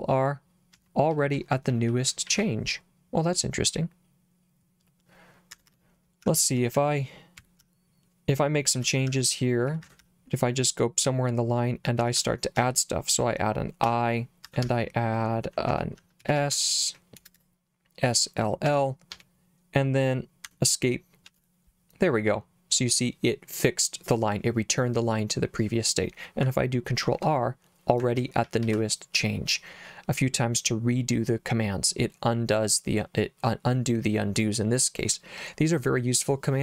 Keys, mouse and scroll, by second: 0.7 ctrl+r, 1.1 ctrl+r, 1.3 ctrl+r, 1.5 ctrl+r, 1.8 ctrl+r, 2.1 ctrl+r, 2.2 ctrl+r, 5.5 Escape, 5.7 Escape, 6.2-10.0 typing, 9.8 Escape, 11.7-17.4 typing, 14.5 Escape, 18.6 l, 19.1 l, 20.5 Escape, 21.3 shift+u, 27.0 ctrl+r, 28.1 ctrl+r, 28.4 ctrl+r, 28.6 ctrl+r.